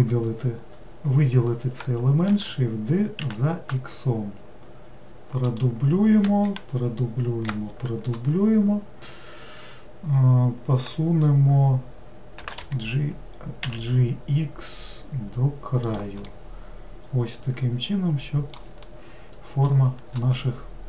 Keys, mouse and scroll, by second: 2.3 shift+d, 6.6 shift+r, 12.4 g, 16.3-20.8 middle drag.